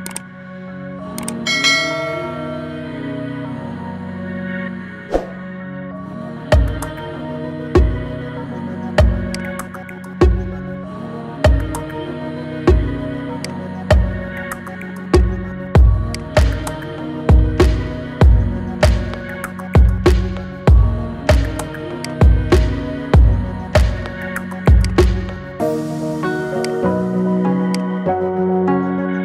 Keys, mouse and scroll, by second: 0.9-2.7 scroll up 4, 2.7 t, 3.7-4.2 scroll up 1, 4.2-4.6 scroll up 1, 4.6-5.1 scroll down 2, 5.1-5.9 middle drag, 5.9-6.5 scroll down 7, 6.5-7.4 middle drag, 7.4 shift+a, 10.5 KP_3, 11.0-11.4 scroll up 5, 11.4-11.8 shift+middle drag, 11.8-12.3 scroll down 4, 12.3 g, 13.7 r, 15.3 s, 17.1 g, 18.6 click, 19.7 g, 22.5 KP_7, 23.7 g, 25.1 r, 27.1 g, 28.0 r.